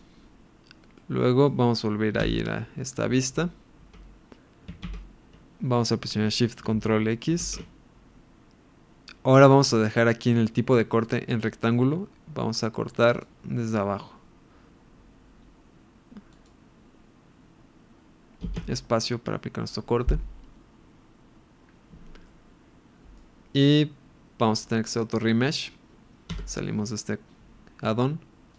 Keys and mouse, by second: 0.0 click, 0.9-1.5 middle drag, 2.2 KP_1, 4.8 ctrl+KP_1, 7.4 ctrl+shift+x, 21.0 space, 22.2-23.2 middle drag, 26.3 Escape.